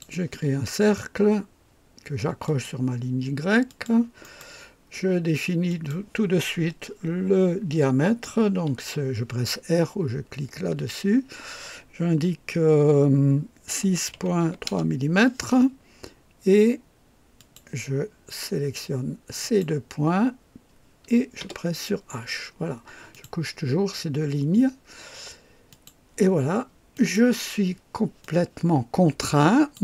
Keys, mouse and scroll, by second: 2.4 click, 3.6 click, 4.2 right click, 5.7 click, 10.7 r, 13.7-15.7 typing, 17.3 click, 18.1-18.8 typing, 19.4 click, 20.3-22.5 typing, 23.1 click, 25.7 click, 26.9 click, 28.2-29.8 drag.